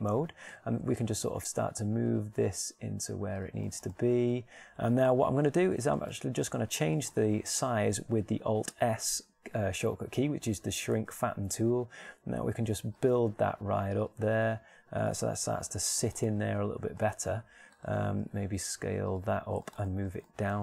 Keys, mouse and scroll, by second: 3.4 g, 12.0 alt+s, 14.6 g, 16.2 alt+s, 16.2 click, 17.3 middle click, 19.2 alt+s.